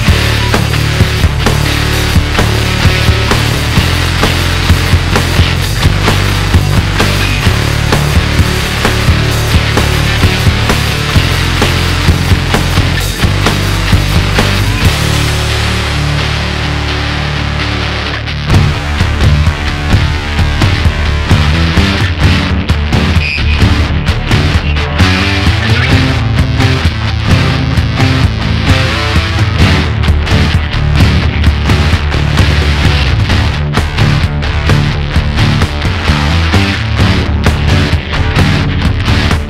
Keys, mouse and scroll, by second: 2.3 click, 2.6-5.7 drag, 8.0 click, 11.7 click, 11.9-15.0 drag, 15.6 click, 16.3 click, 16.5-19.6 drag, 36.3 click, 37.4 click, 39.1 click.